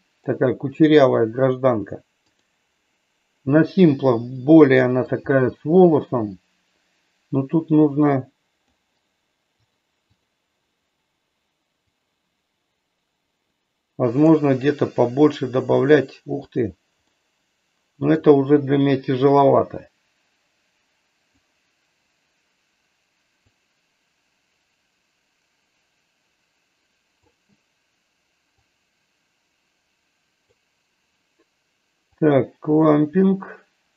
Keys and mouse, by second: 2.3 click, 4.6 middle click, 7.6-8.6 drag, 9.6 click, 12.1-16.0 drag, 17.3-18.3 middle drag, 19.3-23.0 drag, 23.3-27.2 drag, 28.5-30.5 drag, 32.3-33.9 drag.